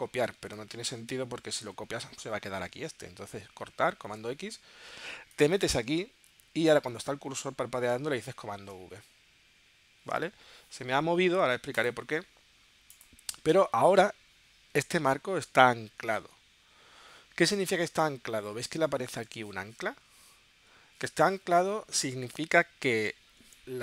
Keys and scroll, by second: 4.0 super+x, 8.6 super+v.